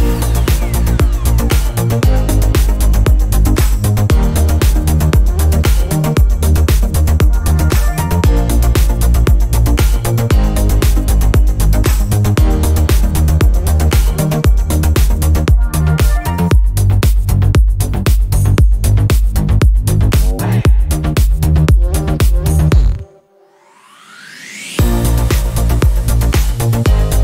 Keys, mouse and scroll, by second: 0.1 ctrl+scroll up 2, 0.6 ctrl+scroll up 2, 1.9 ctrl+click, 3.6 click, 5.8 click, 6.9-8.5 ctrl+shift+drag, 10.3 click, 11.0-13.9 drag, 15.0-16.5 drag, 19.6 click, 21.9 click, 23.2-26.3 drag.